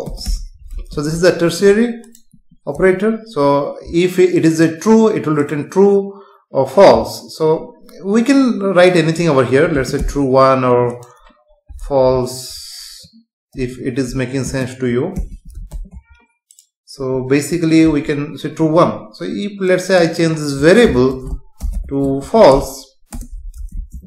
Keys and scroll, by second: 0.9 ctrl+s, 2.8 F5, 9.7 space, 12.1 End, 13.5 Left, 14.4 space, 15.7 ctrl+s, 17.9 F5, 21.2 BackSpace, 23.1 Return, 23.7 ctrl+s.